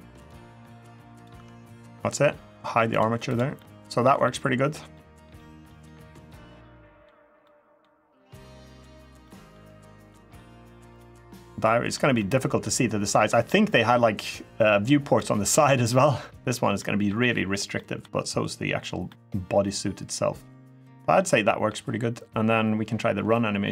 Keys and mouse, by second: 0.0 Tab, 0.0 click, 0.0 space, 0.9 click, 1.1 Tab, 2.7 click, 3.0 click, 3.3-3.8 middle drag, 4.0-4.5 middle drag, 4.7 middle click, 5.1-5.5 middle drag, 5.6-6.8 middle drag, 7.2-7.6 middle drag, 8.2-8.6 middle drag, 9.0-9.3 middle drag, 9.8-10.1 middle drag, 10.7-11.7 middle drag, 12.0-12.4 middle drag, 12.9 middle drag, 14.9-15.3 middle drag, 15.6-16.2 middle drag, 16.5 middle drag, 17.5 middle drag, 18.8-21.0 middle drag, 21.2 middle drag.